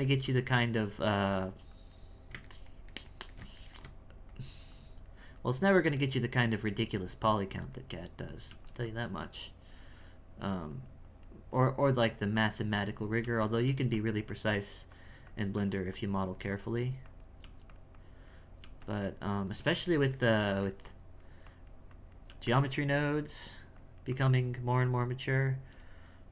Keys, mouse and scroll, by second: 0.8-2.5 drag, 2.5-4.3 ctrl+middle drag, 4.3-8.5 drag, 8.8-13.2 drag, 13.2 f, 13.6 f, 14.3-17.4 drag, 17.4 f, 17.9 click, 18.6 f, 19.0 click, 19.9 shift+middle click, 20.3 f, 20.8-22.2 drag, 22.2 f, 23.7-26.3 drag.